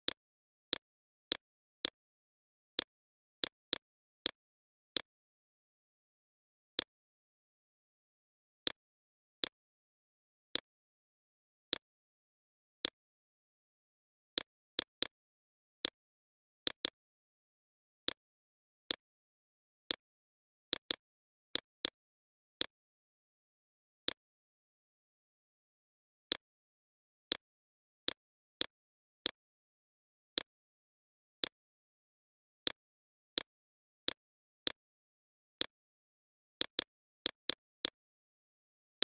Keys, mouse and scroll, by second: 8.5 BackSpace, 11.5 alt+click, 14.2 click, 18.0-25.2 alt+shift+drag, 26.1 Left, 26.3 typing, 26.9-32.7 drag, 35.1 Left, 35.5 typing, 36.1 click, 37.1 right click, 37.6 click.